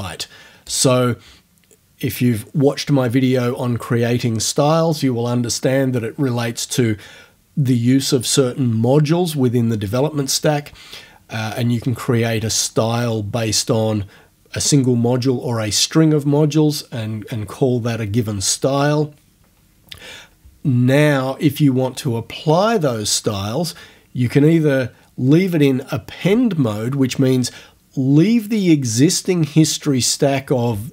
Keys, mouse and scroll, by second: 0.7 click.